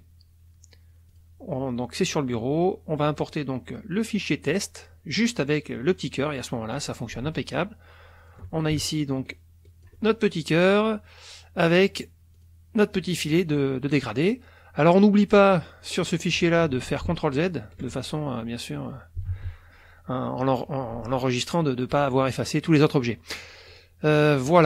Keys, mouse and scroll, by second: 1.1 click, 4.5 click, 6.2 click, 7.5 ctrl+shift+click, 9.1 ctrl+click, 10.1 ctrl+click, 11.6 click, 11.9-12.4 scroll up 1, 12.4 click, 15.5 click, 16.3 click, 17.0 ctrl+z, 19.3 ctrl+s.